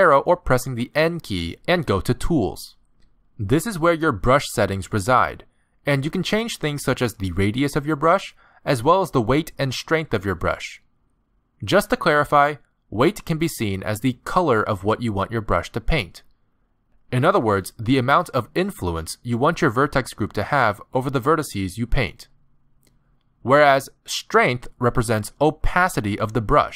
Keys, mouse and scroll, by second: 1.4 n, 1.7 n, 3.5 click, 5.7 click, 7.1 click, 8.7 click, 15.2 middle click, 16.6 click, 23.0 click, 25.4 click.